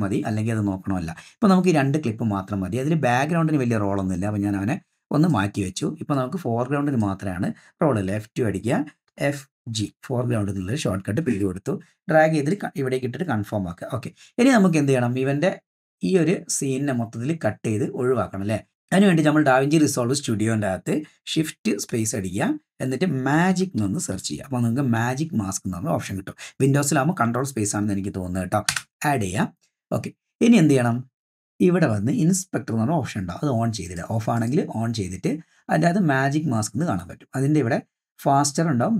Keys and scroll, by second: 8.1 F2, 9.1 f, 9.8 shift+g, 10.7 Return, 22.0 shift+space, 23.1-24.8 typing, 28.7 Return.